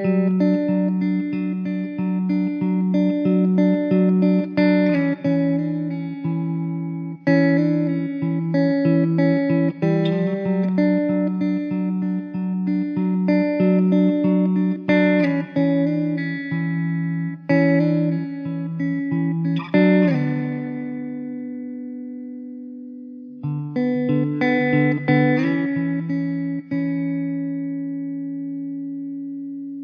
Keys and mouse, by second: 0.3 middle click, 2.8 middle click, 5.8 middle click, 8.9 middle click, 12.3 alt+w, 12.7 alt+middle click, 16.5 middle click, 17.8 2, 19.0 alt+w, 19.8 middle click, 22.6 1, 25.6 alt+w, 26.4 alt+middle click.